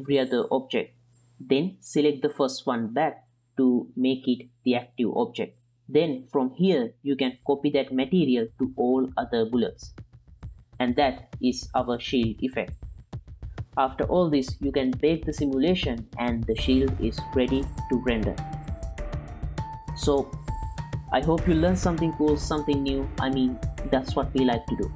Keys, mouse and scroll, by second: 2.0 click, 4.3 ctrl+click, 6.4-9.2 drag, 10.7-13.0 drag, 13.7 click, 15.1 click, 18.0 click, 18.1 space, 21.9 z, 23.6 z.